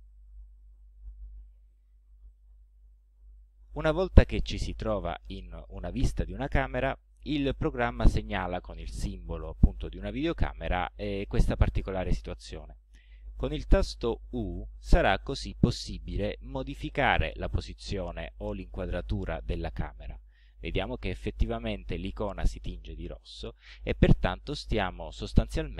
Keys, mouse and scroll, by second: 0.6 c, 14.5 u, 16.9-18.5 right drag, 18.9 right click, 20.2 right click, 21.2 middle click, 24.4-25.7 middle drag.